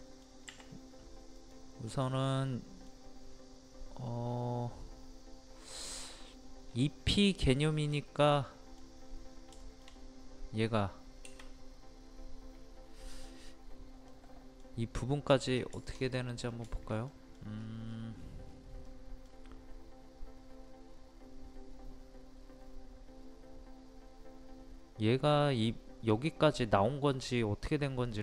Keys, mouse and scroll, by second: 1.4 click, 2.1 middle click, 3.3 scroll up 1, 6.7 scroll down 1, 8.4 middle click, 9.6 shift+middle click, 11.6-14.1 scroll up 1, 14.1-15.3 middle drag, 15.3 scroll down 1, 15.9 shift+middle click, 16.2 scroll down 1, 16.7 shift+middle click, 17.6 scroll up 1, 18.9-28.2 middle drag.